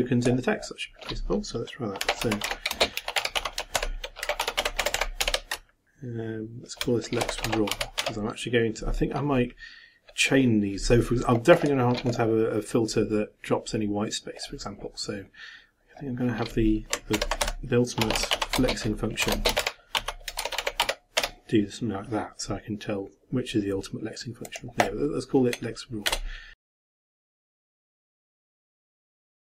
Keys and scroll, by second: 3.5-5.7 typing, 7.0-8.5 typing, 17.1 ctrl+m, 17.4 ctrl+b, 20.1-21.7 typing, 29.3-29.5 typing.